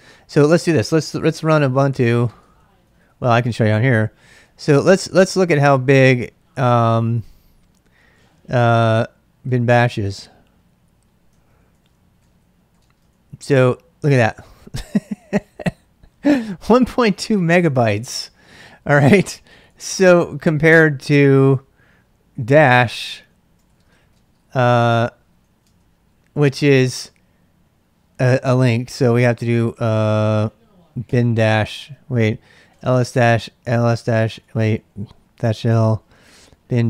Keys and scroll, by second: 1.0-13.2 typing, 19.3-20.9 typing, 23.0-26.0 typing, 28.2-29.1 typing, 30.8-36.8 typing, 31.8 ctrl+c.